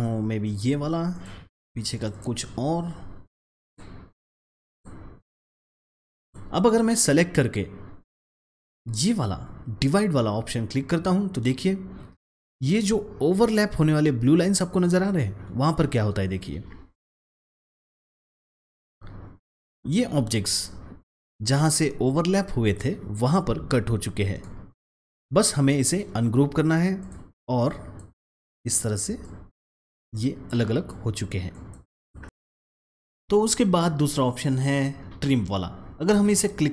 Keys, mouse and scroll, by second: 1.2 click, 2.0 double click, 3.2-12.2 drag, 18.4 click, 24.3-25.8 drag, 25.8 right click, 26.5-30.1 drag.